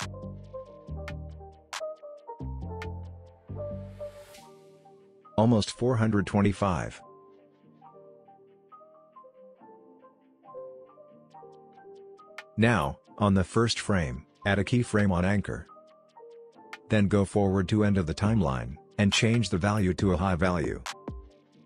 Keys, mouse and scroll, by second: 0.2-1.7 scroll down 1, 3.8-7.3 drag, 9.3-9.8 scroll down 1, 9.8-11.6 scroll up 1, 16.1-18.4 drag.